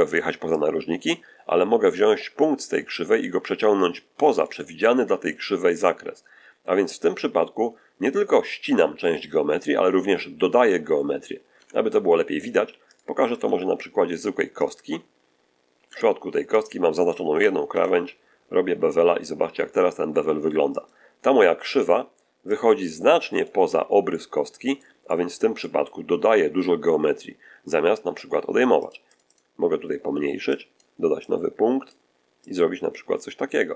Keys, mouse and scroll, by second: 0.4-4.5 drag, 11.5 Tab, 12.6 x, 12.8 click, 13.4 shift+a, 14.5 click, 15.8 Tab, 16.4 right click, 17.6 ctrl+b, 20.6 click, 22.4-23.6 drag, 24.0 middle click, 25.0 middle click, 27.4-27.7 scroll up 1, 28.7 click, 30.4 click, 31.2-32.0 drag, 32.4-33.7 drag.